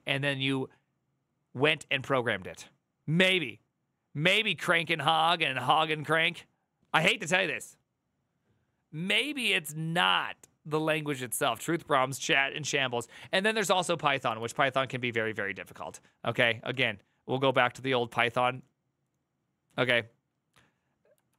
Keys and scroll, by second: 14.1 alt+=, 16.4 Tab, 21.0 alt+f.